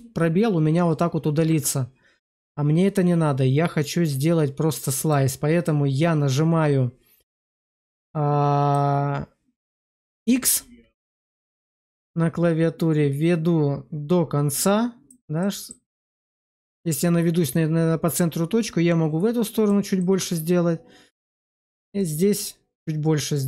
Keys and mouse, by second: 7.7 click, 11.8 click, 11.8 x, 15.3 middle click, 18.6 click, 19.9 middle click, 21.9 click.